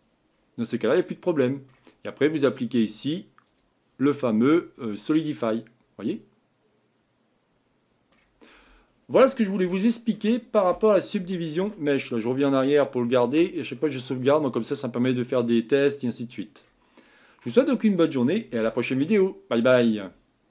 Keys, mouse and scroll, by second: 0.3-0.7 scroll down 4, 0.7-3.6 middle drag, 3.6 click, 4.1 middle click, 4.7-5.5 scroll up 5, 5.5-8.4 middle drag, 8.4-9.7 scroll down 10, 9.7-11.2 shift+middle drag, 11.2 ctrl+z, 11.6 ctrl+z, 13.8 middle click, 14.7-15.4 scroll up 4, 15.4-16.9 middle drag, 16.9-17.7 scroll down 2, 17.7-18.7 scroll down 1, 18.7-20.5 shift+middle drag.